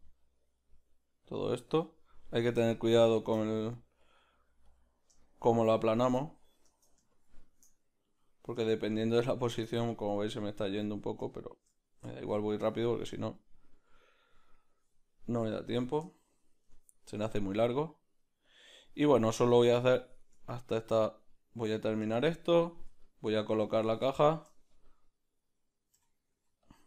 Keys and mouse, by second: 2.8 shift+middle click, 3.4 middle click, 9.8-13.1 middle drag, 11.3-26.7 shift+drag, 16.1 shift+middle click, 23.1 middle click, 24.1 shift+middle click, 24.6 middle click, 26.7 middle click, 26.7 f.